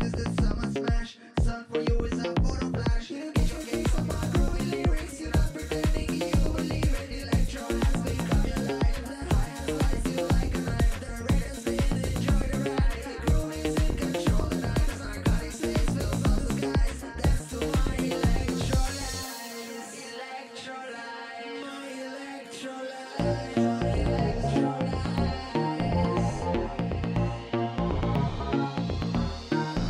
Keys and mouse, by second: 2.2-3.6 drag, 3.9-7.6 drag, 11.3 middle click, 12.2 click, 13.2-14.4 middle drag, 14.4-16.0 drag, 16.3-17.6 drag, 19.5 a, 23.0-24.4 drag, 26.9 a, 27.8 click.